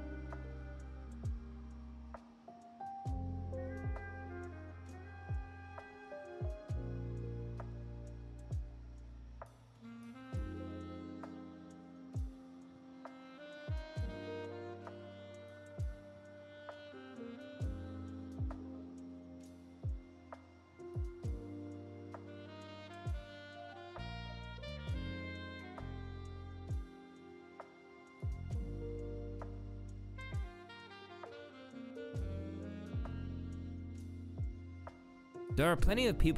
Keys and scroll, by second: 9.1 F1, 11.3 ctrl+v, 23.4 F1.